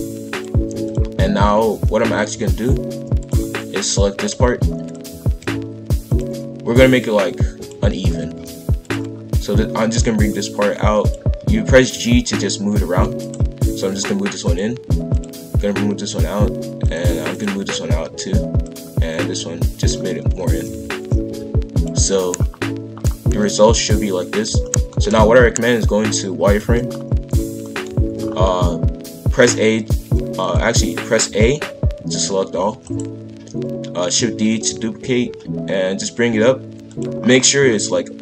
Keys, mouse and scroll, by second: 1.3 shift+f, 4.1 click, 5.2 shift+f, 6.5 g, 7.9 shift+f, 11.0 click, 11.9 g, 13.8 g, 15.1 click, 15.5 g, 16.8 click, 17.3 click, 17.5 g, 19.1 click, 19.3 g, 20.4 shift+f, 21.9 a, 22.5-23.0 scroll down 2, 23.2 KP_5, 23.3 KP_1, 24.3-24.6 scroll up 1, 24.6 shift+middle click, 25.2 z, 26.9-27.6 scroll up 1, 27.6 scroll up 1, 27.6 shift+middle click, 28.1-28.6 shift+scroll up 2, 28.6-29.3 scroll down 2, 30.4 click, 31.2 a, 32.6 shift+d, 34.6 g, 37.2-37.8 scroll up 7.